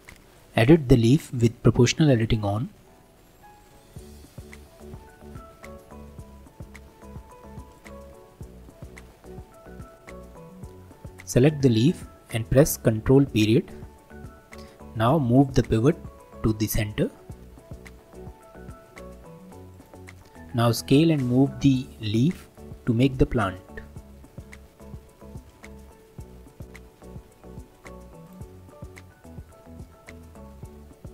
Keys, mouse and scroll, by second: 1.3 Tab, 3.8 click, 4.9 r, 8.0-9.9 middle drag, 9.9 click, 11.2 click, 13.2 ctrl+., 17.5 g, 20.0-20.4 middle drag, 20.4-21.0 scroll up 3, 21.0-25.5 shift+middle drag, 25.5 g, 26.6-27.3 scroll down 1, 27.3 s, 28.7-31.1 middle drag.